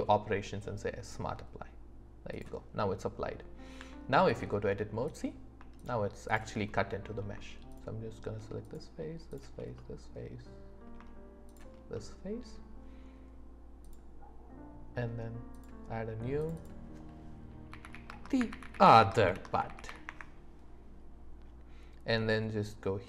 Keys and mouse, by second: 2.3 click, 3.8 Tab, 5.1 click, 5.8 shift+click, 6.3 shift+click, 7.7 shift+middle click, 8.6 shift+middle click, 10.1 click, 10.5 middle click, 11.7 middle click, 13.9-15.7 drag, 16.4 click, 16.6-20.1 drag, 19.9 t.